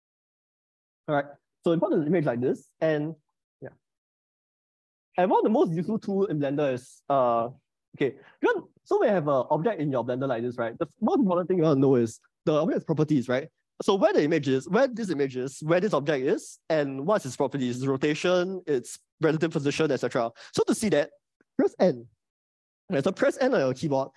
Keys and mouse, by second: 0.2 Delete, 0.8-2.4 middle drag, 3.2 middle click, 4.8 click, 22.2 n, 23.7 n.